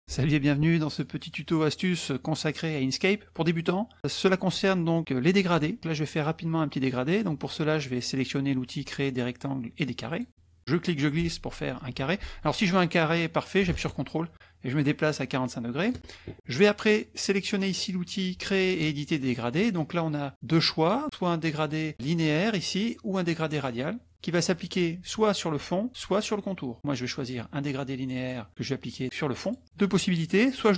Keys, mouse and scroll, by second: 10.1 click, 10.7-16.0 drag, 19.2 click, 28.1 click, 29.4 click.